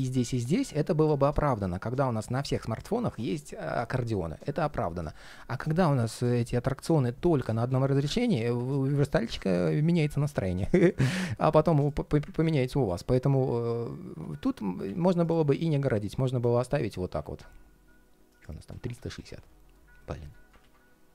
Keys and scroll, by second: 7.4 super+z, 7.9 super+z, 8.7 super+z, 16.8 alt+a, 20.3 super+z.